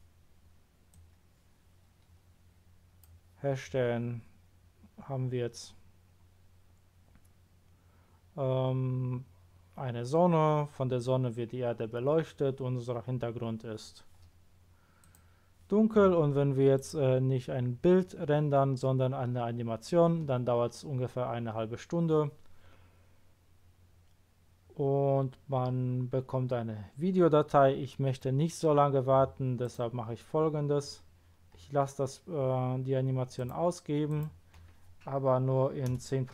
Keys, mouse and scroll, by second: 0.9-2.8 drag, 15.0 click, 16.7 click, 29.6 click, 30.9-31.3 scroll up 1, 31.4 scroll up 1, 34.1 click, 35.9 BackSpace.